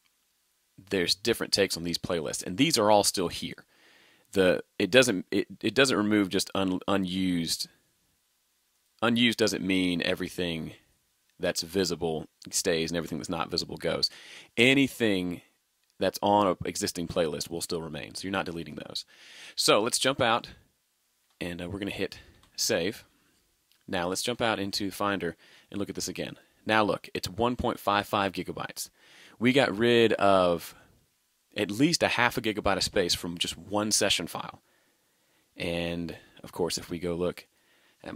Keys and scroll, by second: 21.3 super+Tab, 22.4 super+s, 23.0 super+Tab.